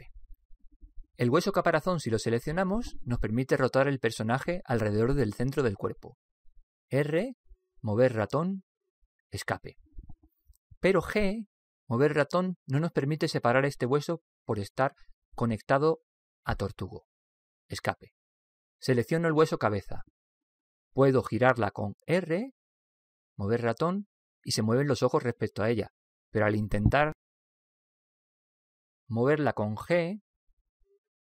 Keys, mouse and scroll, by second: 3.0 right click, 4.8 r, 12.1 g, 22.0 right click, 23.1 r.